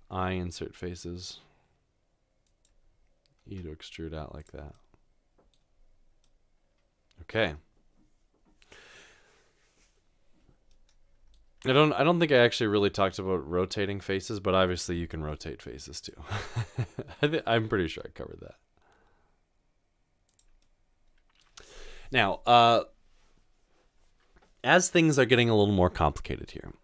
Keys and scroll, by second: 0.2 typing, 3.4 typing, 15.0-15.8 typing, 17.9 typing.